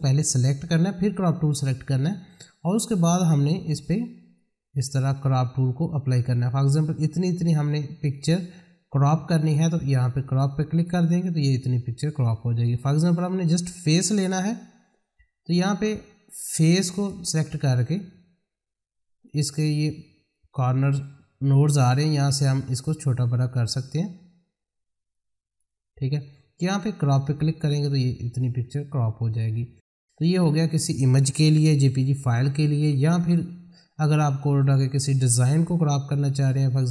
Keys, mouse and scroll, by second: 1.4 click, 4.3-10.6 drag, 10.7 click, 13.4-23.1 drag, 25.1-27.2 drag, 30.3 click, 33.3 click, 34.6 middle click, 35.2 click, 35.5 middle click.